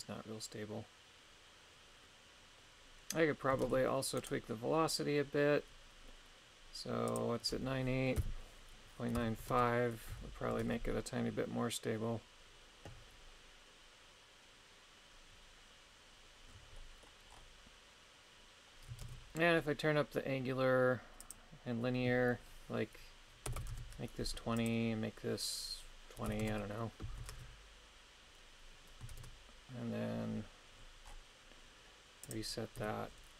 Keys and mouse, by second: 3.7 shift+space, 4.2 right click, 7.2-9.6 drag, 10.6 shift+space, 16.8 middle click, 19.0 shift+space, 21.3-23.8 drag, 24.7-26.5 drag, 27.3 shift+space, 29.1 shift+space, 32.4 click, 32.8 KP_3.